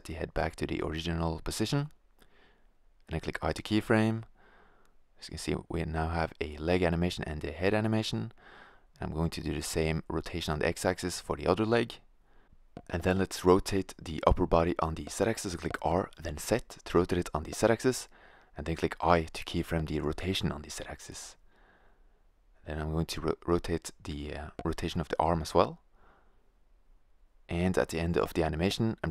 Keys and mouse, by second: 0.2 click, 1.4 r, 2.0-2.5 drag, 2.7 i, 5.9 right click, 6.5 i, 7.6 click, 8.0 r, 9.1-9.7 drag, 9.8 i, 10.1 click, 10.7 r, 12.2-12.9 drag, 12.9 i, 13.8 click, 14.3 right drag, 14.6-15.0 drag, 14.6 r, 16.1-16.7 drag, 17.6 i, 18.0-18.6 drag, 18.6 r, 19.8 i, 20.2-20.8 drag, 21.6-22.2 right drag, 22.4 i, 22.8 click, 23.6-23.9 drag, 23.6 r, 24.8 i, 25.3-26.0 drag, 26.3 click, 27.3-29.0 drag, 28.5-29.1 right drag.